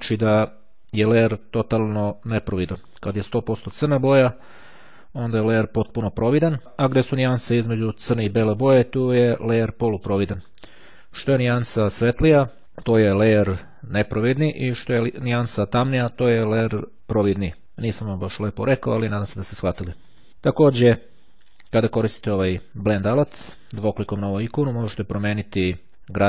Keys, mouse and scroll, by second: 22.3-23.7 drag.